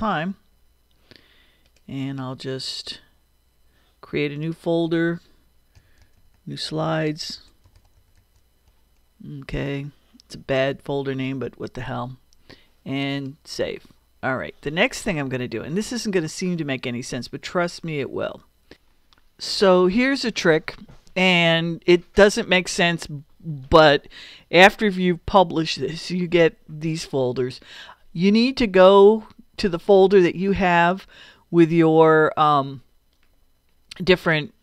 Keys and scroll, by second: 5.5-8.3 typing, 8.7 Return.